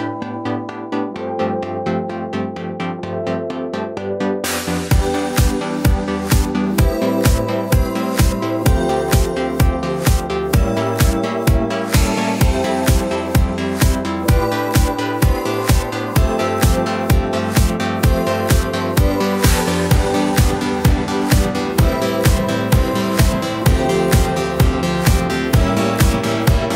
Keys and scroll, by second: 0.8 super+d, 17.0 super+d.